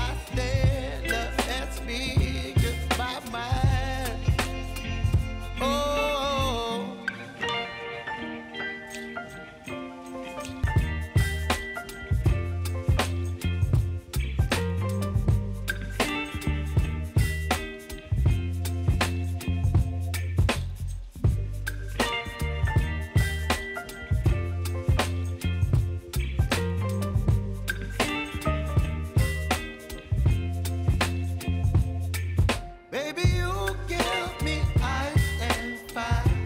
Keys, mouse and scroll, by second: 2.5-23.4 drag, 23.4 Return, 24.7 click, 25.8 p, 26.7-32.1 drag, 32.1-32.7 alt+scroll up 1, 33.8 click, 34.2 space, 35.7-36.4 drag.